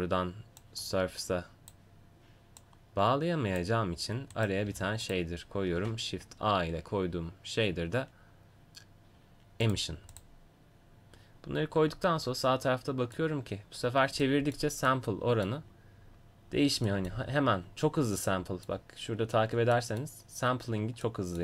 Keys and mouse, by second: 4.7 g, 5.8 shift+a.